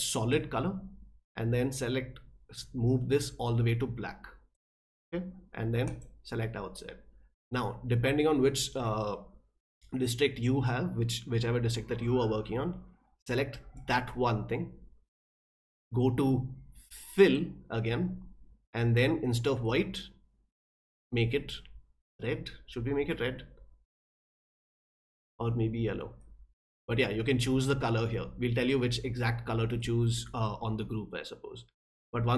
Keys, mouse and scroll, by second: 0.2 click, 1.7-4.5 drag, 5.8 click, 13.7 click, 17.2 click, 19.6-21.0 drag, 24.1 click, 26.2-28.7 drag, 29.8 click.